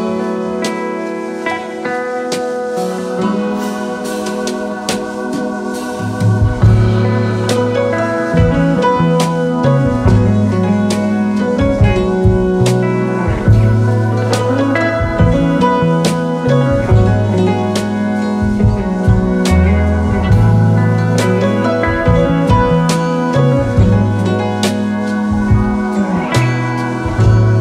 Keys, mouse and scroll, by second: 2.7-4.0 typing, 9.4 shift+click, 11.9 double click, 15.1 shift+click, 16.1 right click, 19.5 right click, 21.2 shift+click, 21.6 alt+click, 24.5 double click, 24.8 alt+scroll down 2, 25.1 space.